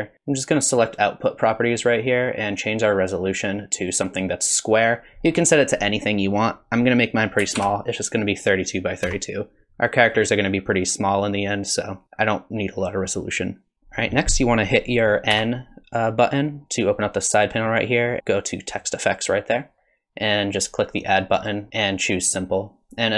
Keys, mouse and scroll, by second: 0.9 click, 3.3 click, 15.3 n, 18.7 click, 21.4 click, 21.7 click.